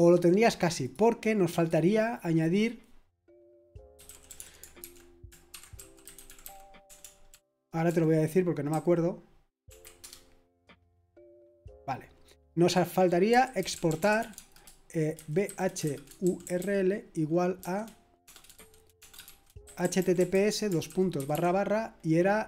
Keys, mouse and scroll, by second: 0.8 click, 1.5 click, 3.6 click, 3.7-10.0 typing, 12.6 click, 13.0-21.3 typing.